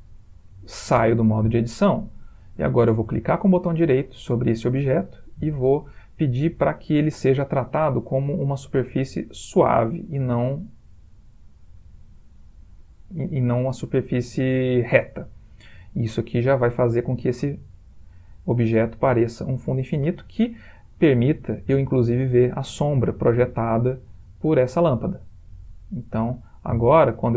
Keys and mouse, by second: 1.1 Tab, 2.0 middle click, 5.2 right click, 12.1 middle click, 21.0 middle click, 21.8 middle click, 22.2 middle click, 23.9 click, 24.6 g, 26.6 middle click.